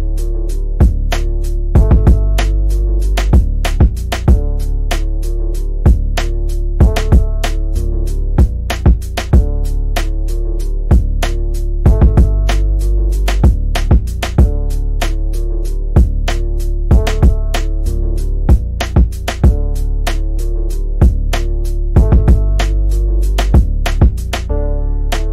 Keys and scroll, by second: 18.0 shift+Home, 23.7 Home, 23.9 shift+End, 24.9 q.